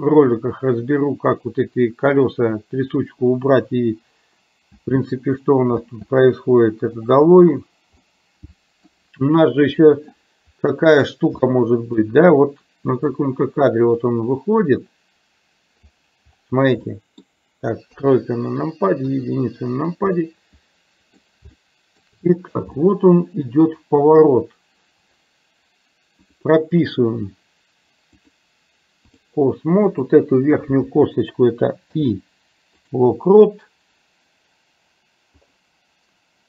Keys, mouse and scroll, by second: 4.8 space, 7.1 click, 8.1-8.9 middle drag, 9.5-10.3 middle drag, 11.5 shift+middle click, 13.1-16.0 drag, 17.0 middle click, 18.0 KP_3, 19.1 KP_1, 20.3-21.3 middle drag, 21.8 shift+middle click, 22.9-23.6 shift+middle drag, 28.4-29.4 drag, 30.0 click, 31.9 i, 35.6 click.